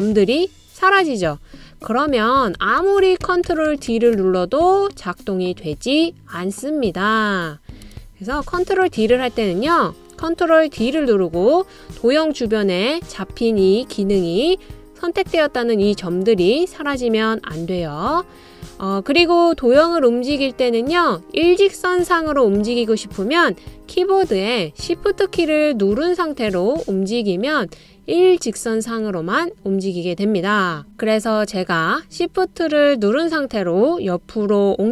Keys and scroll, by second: 2.7 super+d, 3.0 super+d, 3.2 super+d, 8.3 BackSpace, 11.2 super+d.